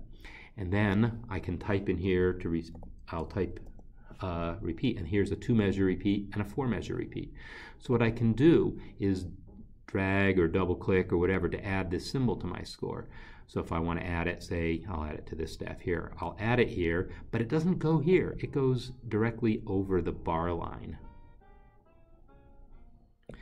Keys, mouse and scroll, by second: 0.8 click, 2.7 r, 3.2 e, 8.0 click, 18.2 click, 23.3 click.